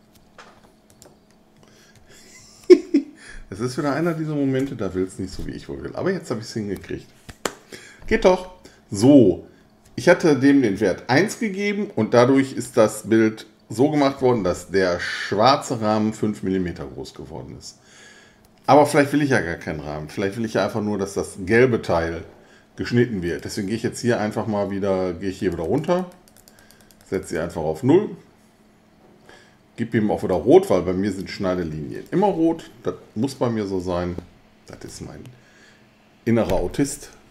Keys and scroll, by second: 1.9 BackSpace, 3.6 1, 4.6 Return.